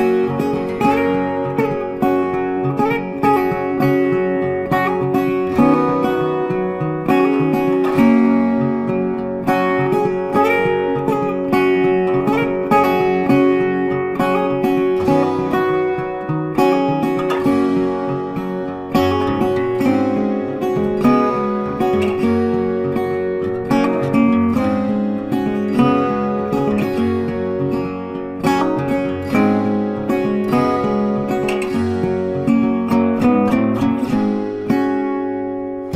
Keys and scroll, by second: 17.5 ctrl+t, 32.4 ctrl+t.